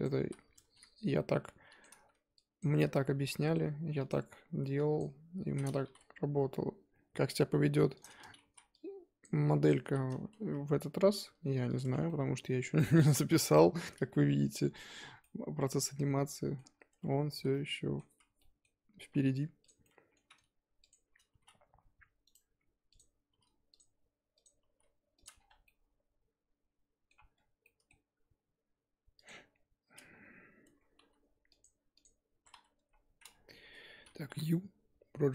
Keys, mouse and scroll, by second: 0.0 click, 0.2 z, 0.6 s, 2.1 z, 2.6 click, 2.8 z, 3.1 s, 4.5 z, 5.0 click, 5.5 z, 5.8 s, 8.5 z, 9.2 click, 9.7 click, 9.9 z, 10.3 g, 11.8 Tab, 11.9 scroll down 1, 12.1-16.7 middle drag, 16.7 scroll up 3, 16.9 Tab, 17.4 z, 17.5 middle click, 18.0 z, 18.4 middle click, 19.1 2, 19.6 click, 19.8-20.9 middle drag, 20.9 shift+click, 21.3 g, 22.9 click, 23.3 g, 24.4 click, 24.6 g, 25.3 scroll down 4, 25.5 Tab, 25.7-27.3 middle drag, 27.3-27.6 scroll down 4, 27.6-29.2 middle drag, 29.2 click, 30.1-30.6 scroll down 2, 30.6 Tab, 31.0 a, 31.6 click, 32.0 click, 32.3 Tab, 32.5 a, 33.5 KP_1.